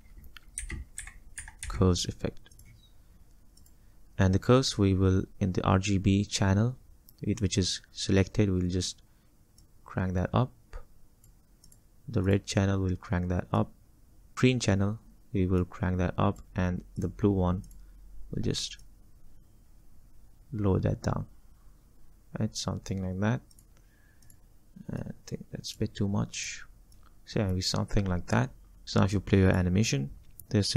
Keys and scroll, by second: 0.4-2.2 typing.